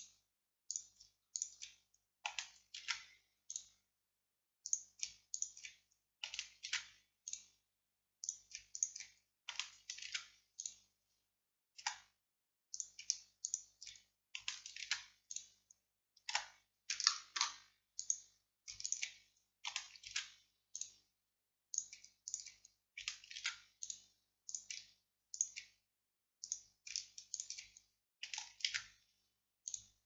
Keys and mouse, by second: 0.8-2.0 drag, 0.8-2.0 right drag, 2.9 alt+m, 6.7 alt+m, 10.1 alt+m, 11.9 z, 14.9 alt+m, 16.4 z, 17.4 click, 18.1 middle click, 20.2 alt+m, 23.5 alt+m, 28.8 alt+m.